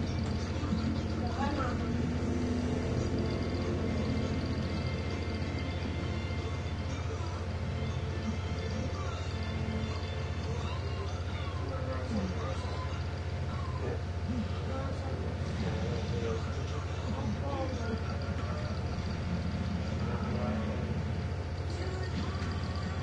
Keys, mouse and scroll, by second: 0.0-0.8 typing, 2.7 click, 4.3 click, 5.5 click, 6.5 click, 8.4 click, 13.7 click, 14.8 click, 16.0 click, 18.4 space, 20.3 click, 22.6 End.